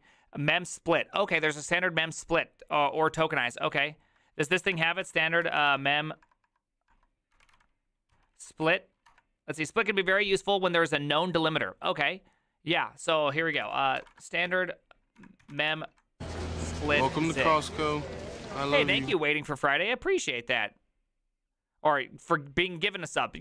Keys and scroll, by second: 4.7-9.1 typing, 13.6 ctrl+t, 13.7-17.8 typing.